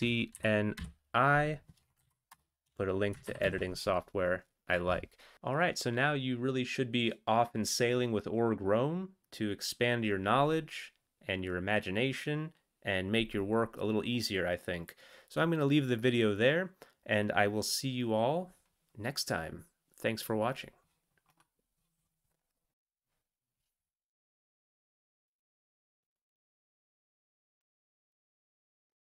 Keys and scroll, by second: 0.5 n, 0.7 i, 2.0 Down, 2.3 Return, 3.2 ctrl+x, 3.4 ctrl+s.